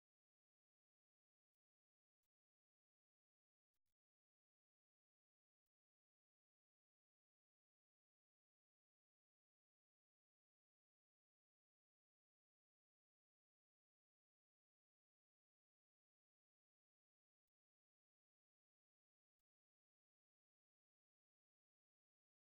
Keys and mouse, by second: 0.9 click, 2.9 click, 4.1 middle click, 4.5 2, 4.9 middle click, 6.0 shift+right click, 6.4 alt+right click, 6.9 middle click, 7.6 z, 7.9 z, 8.3 z, 8.5 middle click, 10.0 ctrl+Tab, 11.9 ctrl+Tab, 14.5 1, 15.3 Tab, 16.6 1, 17.5 1, 17.6 z, 18.8 ctrl+middle click, 19.4 shift+middle click, 20.9 ctrl+middle click, 22.0 z.